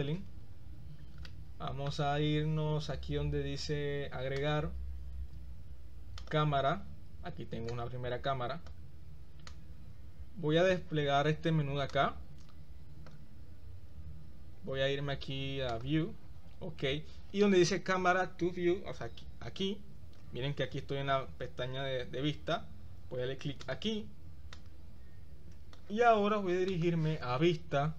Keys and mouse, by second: 0.0 click, 1.3-2.2 shift+middle drag, 4.4-6.6 drag, 7.9-8.8 drag, 9.7-10.9 drag, 12.0-13.1 drag, 15.8 click, 23.6 click, 24.5-25.8 drag, 26.7-27.9 right drag.